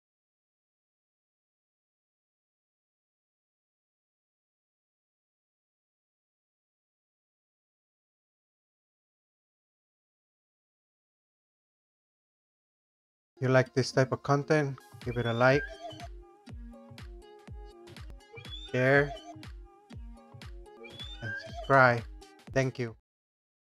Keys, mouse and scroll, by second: 0.0-2.2 typing, 3.9 Escape, 4.2 Escape, 4.2 Escape, 4.8 ctrl+z, 6.8 Escape, 9.7 Escape, 10.0 Escape, 13.1 click.